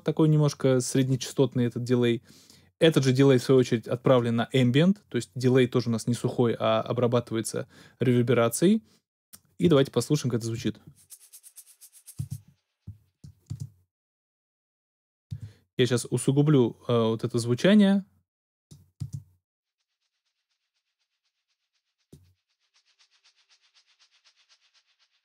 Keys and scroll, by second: 10.5 alt+space, 12.1 space, 12.8 alt+space, 13.5 alt+space, 14.3 space, 15.3 space, 19.0 space.